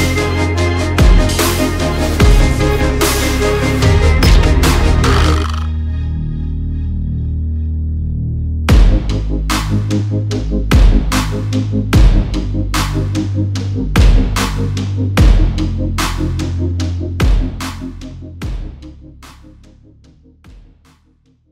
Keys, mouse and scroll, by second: 1.0 click, 1.3 click, 2.5 click, 2.7 click, 3.9 click, 5.1-6.7 typing, 8.1 Tab, 8.3-9.3 typing, 10.9 click, 11.2 space, 12.7 space, 13.1 space, 14.4 space, 14.6 space, 16.2 space, 16.5 space, 17.7 space, 18.0 space, 19.0-21.2 typing.